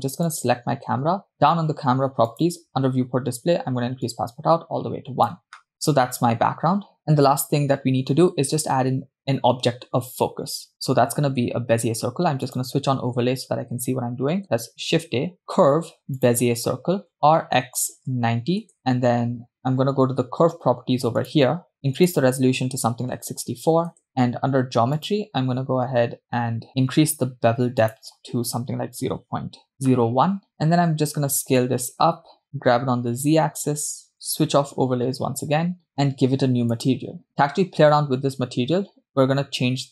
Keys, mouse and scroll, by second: 0.3 click, 2.8 click, 3.2-4.0 scroll down 1, 4.1-5.7 drag, 12.8 click, 15.0 shift+a, 17.5 r, 21.2 click, 22.0-24.1 drag, 25.9-26.2 drag, 26.7-27.8 scroll down 3, 27.8-29.7 drag, 29.7 BackSpace, 31.3 s, 33.0 g, 34.5 click, 36.7 click.